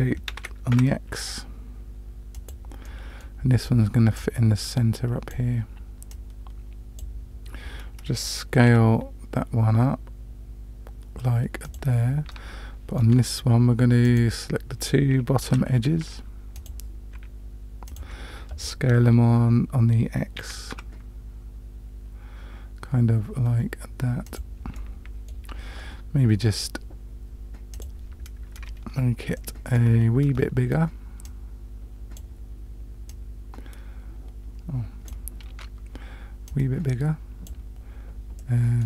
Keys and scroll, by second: 0.3 shift+d, 8.7 s, 13.0 Tab, 15.5 2, 20.4 s, 35.5 Tab.